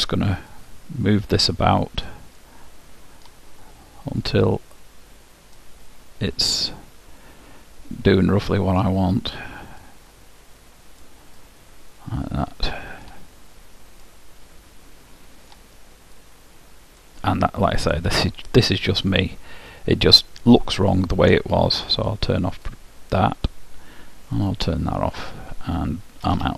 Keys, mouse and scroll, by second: 0.6-2.5 drag, 2.5-4.3 middle drag, 4.3-6.1 drag, 6.0-8.0 middle drag, 9.8-11.8 drag, 11.4-13.2 middle drag, 14.1-16.0 middle drag, 16.4-18.1 drag, 17.5-19.5 middle drag, 22.0-24.0 drag, 24.4-26.4 drag, 25.3-26.4 middle drag, 26.4 Tab.